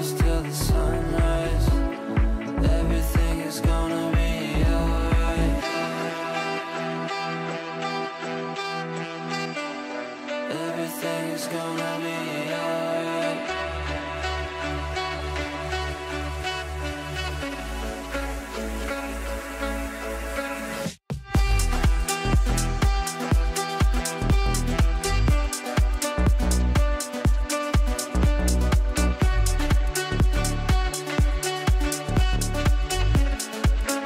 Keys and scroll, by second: 20.7 ctrl+r, 30.0 ctrl+r.